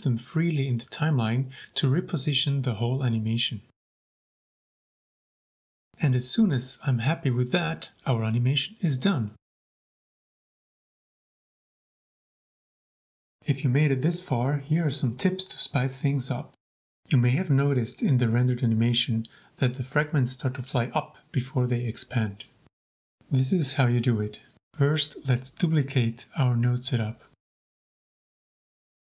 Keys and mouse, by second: 0.0-1.0 typing, 3.7 click, 4.7-7.7 drag, 8.0 shift+space, 23.1 click, 23.6 shift+click, 25.2-26.5 drag, 26.5 b, 28.7 shift+d.